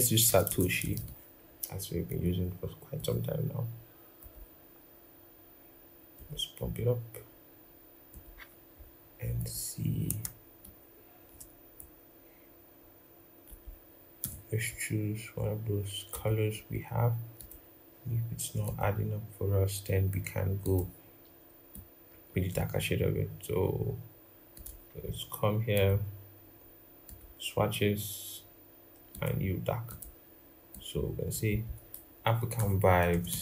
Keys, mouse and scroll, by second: 0.0-0.7 typing, 10.4 shift+click, 13.9 typing, 31.5 double click, 31.8 Down, 32.0 Down, 32.3 Return, 32.9-33.4 typing.